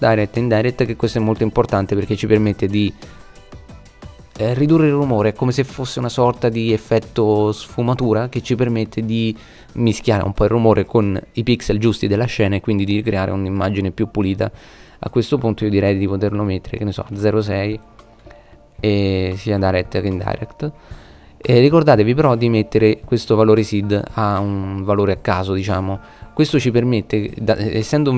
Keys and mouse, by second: 0.3 middle click, 10.7-12.1 middle drag, 13.2 middle click, 15.5-17.4 middle drag, 19.7-20.8 middle drag.